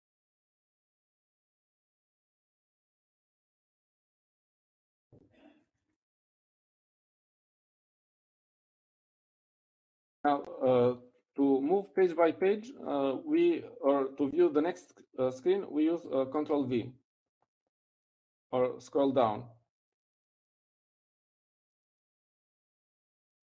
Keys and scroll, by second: 3.3 ctrl+h.